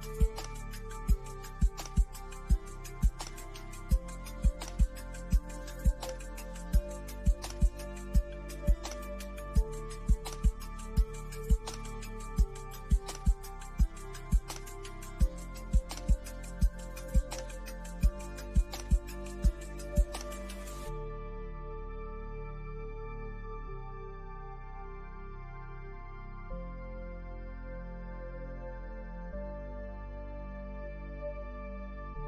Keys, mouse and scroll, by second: 2.1-6.3 drag, 6.3 scroll up 1, 7.5-9.3 drag, 9.3-9.6 scroll up 1, 10.2 middle click, 10.9 scroll up 1, 11.8 middle click, 12.6 scroll down 1, 13.6-16.8 drag, 17.4-28.1 drag, 28.1-32.2 drag.